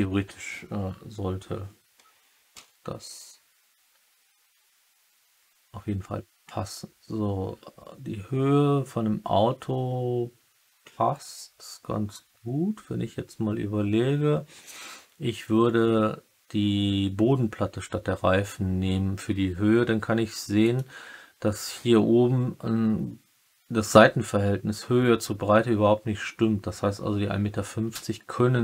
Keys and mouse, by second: 2.5 g, 5.1 g, 20.6 click.